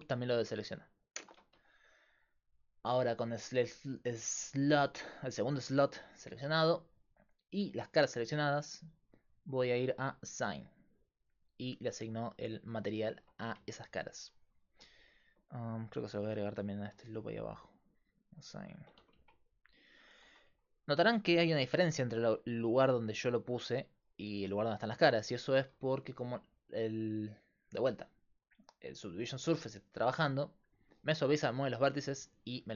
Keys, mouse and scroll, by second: 2.9 middle click, 3.6 click, 9.6-11.3 drag, 12.3-13.4 middle drag, 13.4 a, 15.3-18.7 right drag, 17.9 click, 18.8 click, 19.0 Tab, 20.3 Tab, 22.3-32.7 typing, 22.7-25.1 drag, 26.9-32.7 drag.